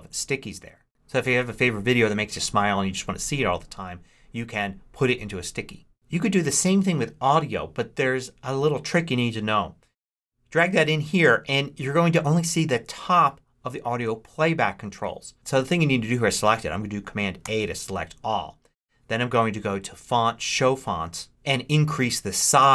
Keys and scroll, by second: 17.3 super+a.